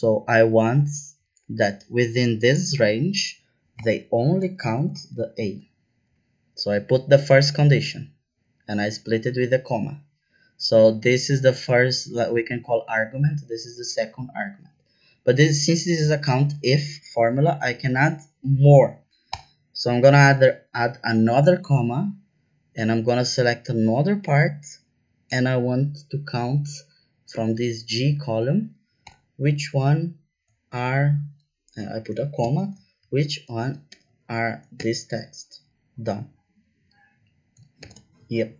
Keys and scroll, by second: 3.7 ,, 4.5 shift+', 5.1 shift+a, 5.4 shift+', 19.3 ,, 29.0 ,, 32.4-34.7 typing, 37.8 shift+0.